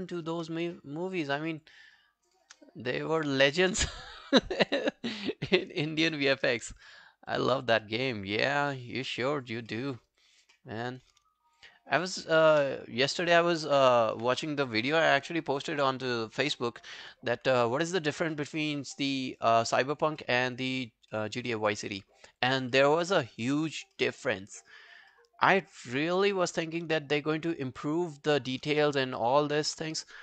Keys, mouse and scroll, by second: 0.1 alt+click, 1.2 shift+click, 1.6 shift+click, 2.7 alt+click, 3.1 alt+right click, 4.0 shift+click, 4.4 shift+click, 4.7 scroll down 3, 4.9 alt+click, 6.2 alt+middle click, 6.4 alt+right click, 6.6 alt+click, 7.1 alt+scroll down 2, 7.3 alt+click, 7.8 alt+scroll down 1, 7.8 alt+middle click, 8.0 alt+right click, 8.3 alt+click, 8.7 alt+middle click, 9.5 alt+right click, 9.7 alt+middle click, 10.0 alt+right click, 10.2 alt+click, 10.6 alt+middle click, 10.9 alt+right click, 11.5 shift+click, 12.4 shift+click, 12.7-13.6 scroll down 4, 13.1 alt+click, 15.1 ctrl+i, 17.3-17.7 scroll down 2, 17.8 alt+click, 18.4 alt+middle click, 18.6 alt+right click, 18.9 alt+click, 19.3 alt+middle click, 19.6 alt+right click, 19.9 alt+click, 20.2 alt+middle click, 20.5 alt+right click, 20.7 alt+click, 21.2 alt+middle click, 21.4 alt+right click, 21.6 alt+click, 21.9 alt+middle click, 22.1 alt+right click, 22.3 alt+click, 22.8 alt+middle click, 23.0 alt+right click, 23.2 alt+click, 24.0 alt+middle click, 24.5 alt+scroll down 1, 24.7 alt+click, 25.1 alt+middle click, 25.4 alt+right click, 25.7 alt+middle click, 26.0 alt+right click, 26.3 alt+middle click, 26.5 alt+right click, 27.1 shift+right click, 29.2 alt+middle click, 29.5 alt+right click.